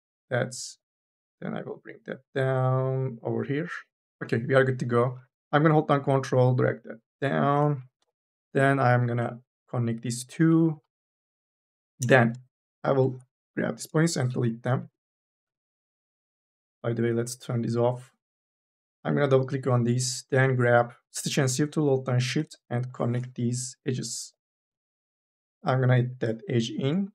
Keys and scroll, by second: 10.6 2, 11.7 1, 11.8 space, 12.8 KP_0, 13.7 Delete, 15.3 2, 18.1 2, 18.6 e, 20.6 m, 21.0 p, 24.3 k, 26.9 3.